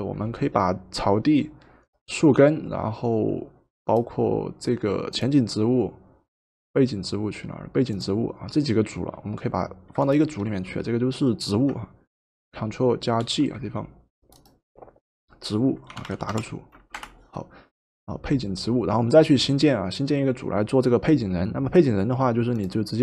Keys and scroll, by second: 13.2 ctrl+g, 15.6-16.9 typing, 17.0 Return.